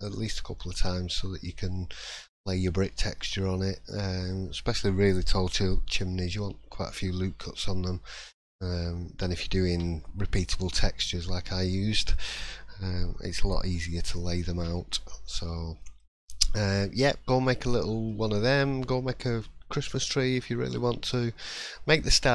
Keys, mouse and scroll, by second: 0.7 click, 2.0 scroll down 2, 2.3 middle click, 2.9 shift+middle click, 3.2 scroll up 2, 7.5 scroll down 1, 8.1 shift+middle click, 9.7 3, 11.4-11.7 scroll down 1, 11.7 middle click, 14.9 shift+middle click, 15.4-15.7 scroll down 2, 15.8 middle click, 16.0 scroll up 2, 16.4 shift+middle click, 17.1 shift+scroll up 1, 18.1 shift+middle click, 19.6-20.2 scroll up 6, 20.7 shift+middle click, 21.1-22.1 scroll down 2, 22.1 middle click, 22.1-22.3 scroll down 3.